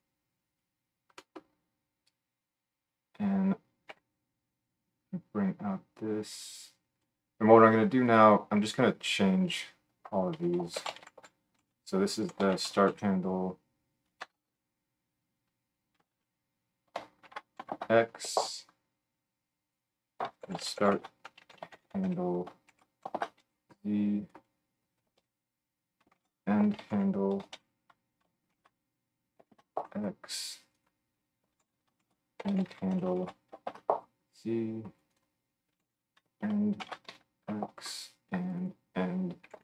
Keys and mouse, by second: 3.9 n, 7.0-8.0 middle drag, 8.0 click, 8.1 middle click, 8.2 click, 14.4 BackSpace, 19.7-20.9 middle drag, 20.9-24.3 shift+drag, 24.3 middle click, 24.4-30.7 drag, 30.7-31.9 middle drag, 31.9-35.0 shift+drag, 35.0 middle click, 35.1-38.5 drag, 38.5 middle click, 38.6-39.6 drag.